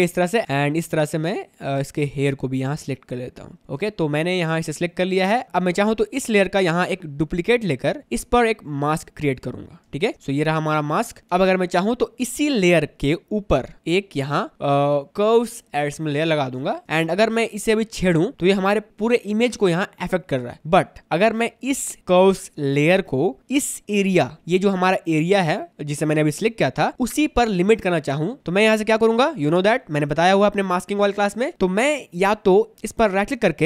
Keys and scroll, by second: 5.3 space, 5.5 ctrl+z, 10.0 space, 11.2 space, 11.5 v, 17.2 ctrl+z, 20.5 ctrl+z.